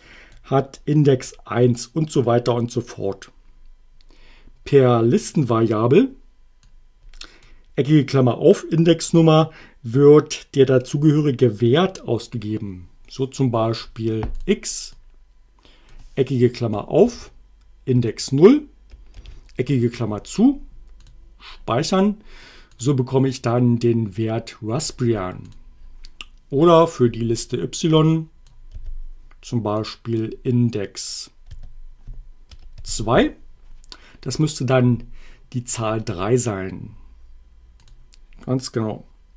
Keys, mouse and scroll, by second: 6.7 click, 14.4 click, 15.0-16.1 drag, 17.0 alt+8, 18.0 0, 19.2 alt+9, 21.0 click, 25.5 click, 28.0 click, 28.8 y, 29.8 click, 31.5 3, 32.5 BackSpace, 32.8 2, 34.3 click, 35.8 click, 37.8 click.